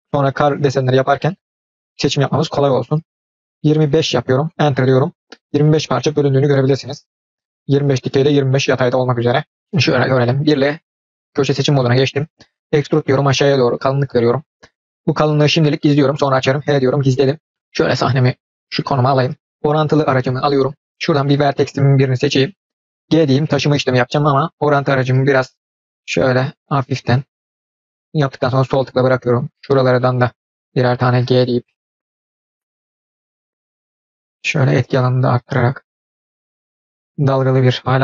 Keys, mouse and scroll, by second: 5.3 middle click, 9.5-10.1 middle drag, 10.5 1, 10.9-11.3 scroll down 1, 11.4-12.2 middle drag, 12.7 e, 14.5-15.2 middle drag, 16.5 h, 17.1-17.5 middle drag, 18.8 middle click, 20.1 click, 22.2-23.2 drag, 23.2 g, 30.2 click, 31.2 g, 32.3 click, 32.7 g, 36.2 click, 36.4 middle click.